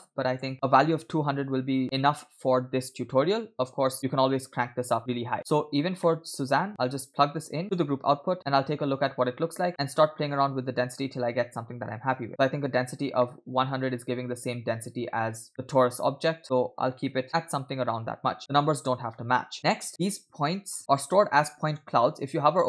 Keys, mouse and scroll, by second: 0.4 0, 1.8-2.2 scroll down 2, 4.0-5.0 scroll up 2, 5.0 scroll down 2, 5.1 middle click, 6.0 middle click, 6.9-7.8 drag, 8.4-9.0 shift+middle drag, 9.7 middle click, 10.6 scroll up 1, 10.7-12.3 drag, 11.7 0, 11.8 0, 13.0 scroll down 1, 13.2-14.8 middle drag, 15.5 shift+middle click, 16.4-17.4 drag, 18.9 scroll down 2, 19.2 middle click, 19.6 click, 20.0-20.8 scroll up 3, 20.9-21.8 drag.